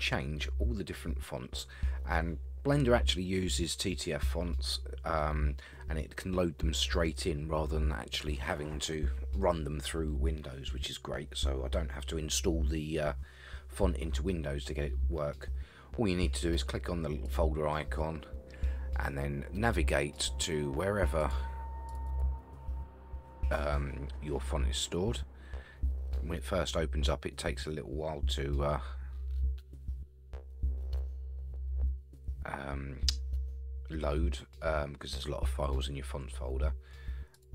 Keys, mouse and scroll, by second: 17.2 click, 37.3 click.